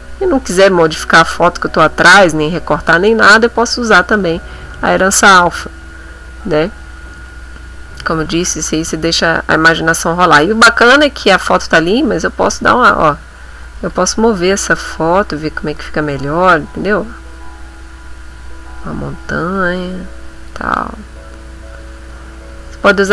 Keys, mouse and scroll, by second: 3.6 click, 11.6-12.9 drag, 13.9-16.3 drag, 16.8-20.6 drag, 21.1 middle click, 21.8 middle click.